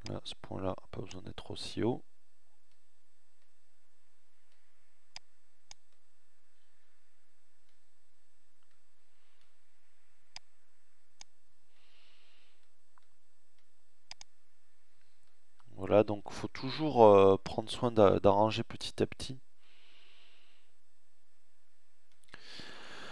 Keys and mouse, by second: 6.0 middle click, 7.8 middle click, 10.4 middle click, 10.7 middle click, 12.0 middle click, 14.2 middle click, 18.2 middle click, 19.5 middle click.